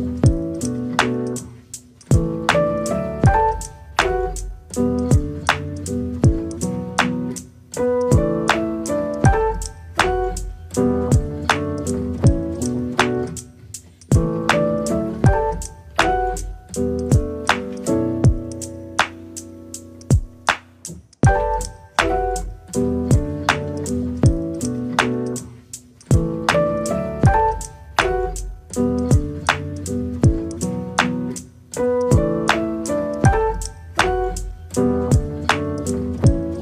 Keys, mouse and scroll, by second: 0.0 scroll down 3, 0.2 middle click, 0.6 shift+a, 1.9-2.4 scroll down 4, 2.4 click, 3.2 r, 6.7 s, 7.3 middle click, 7.9 click, 8.4-9.4 middle drag, 9.4 click, 10.1 middle click, 10.9 click, 11.7 KP_0, 12.9 r, 14.1 middle click, 14.7 click, 15.1 middle click, 15.7 r, 16.8 shift+d, 17.1 click, 17.8 r, 18.8 click, 19.4 KP_0, 21.4 KP_0, 22.1 r, 24.0-25.2 middle drag, 25.2 click, 26.0 r, 26.8 middle click, 27.7 r, 28.6 click, 28.8 middle click, 29.1 click, 29.5 click, 29.9 r, 30.9 r, 31.6 middle click, 32.1 click, 33.4 click, 33.9 middle click, 34.5 r, 36.2 r.